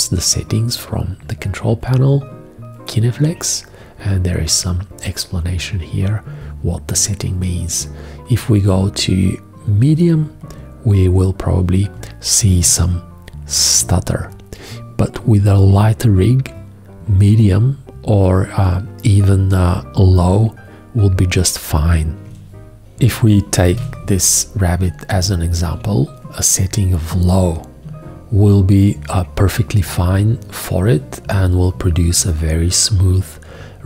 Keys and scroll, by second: 23.4 shift+g.